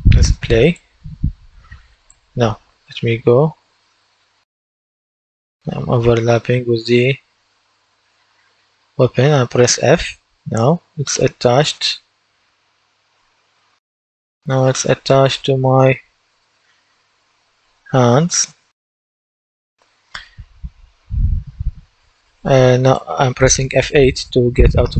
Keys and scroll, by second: 3.4 typing, 6.6-9.0 typing, 10.5 f, 13.9 F8, 14.7-19.0 typing, 21.9 F8, 24.8-24.9 typing.